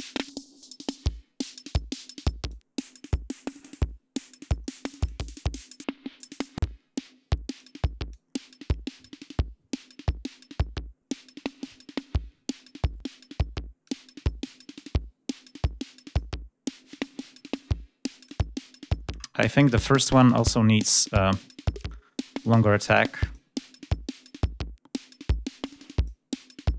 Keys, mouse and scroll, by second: 2.4-5.2 drag, 5.5-7.7 drag, 8.0-11.5 drag, 13.7-16.2 drag, 17.1 click, 22.8 click, 24.1-26.1 drag, 26.4-26.7 drag.